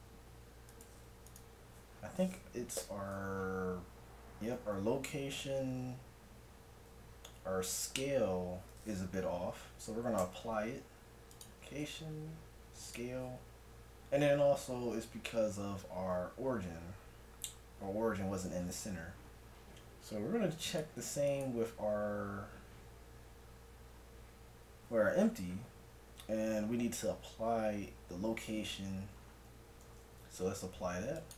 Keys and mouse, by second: 1.3 right click, 2.8 n, 10.2 ctrl+a, 11.8 ctrl+a, 18.9-20.7 middle drag, 20.7-22.5 right drag, 22.5-25.8 middle drag, 29.2 middle click, 29.9 ctrl+a.